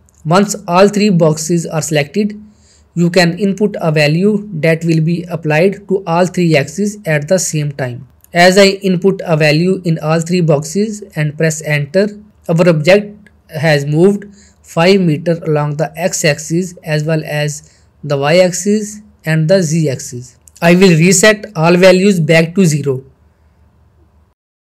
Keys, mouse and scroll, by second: 4.9 scroll down 1, 5.7-7.8 middle click, 6.3 middle click, 7.4-7.8 shift+middle drag, 12.4-14.3 shift+middle drag, 13.9 typing, 17.0-17.5 middle click, 17.3 middle drag, 22.2-23.2 drag.